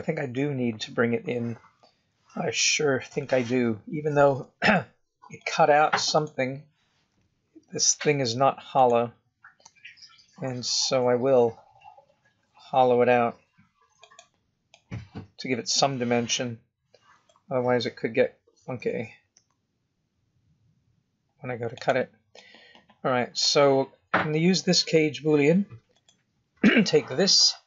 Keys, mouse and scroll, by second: 1.9 KP_7, 3.1 shift+middle click, 3.1 shift+scroll down 1, 5.3 click, 6.1 click, 6.8 click, 7.1 g, 8.7 click, 9.6 g, 14.7 middle click, 16.2 middle click, 17.3 KP_1, 18.7 g, 22.3 middle click, 25.9 click.